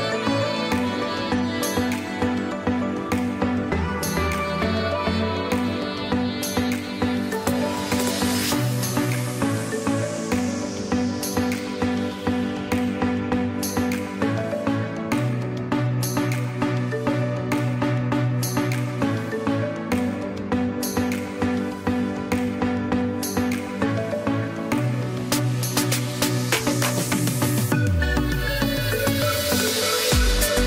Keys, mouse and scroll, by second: 0.2 click, 2.1 z, 2.5 click, 3.3 space, 3.5 click, 4.1 space, 6.2 click, 8.3 space, 8.7 click, 8.8 space, 9.1 click, 9.6 space, 10.9 click, 14.5 click, 16.3 ctrl+j, 17.3 ctrl+shift+a, 22.9 click, 23.1 space, 23.4 click, 23.8 space, 24.2 j, 25.2 click, 27.7 x, 28.0 click.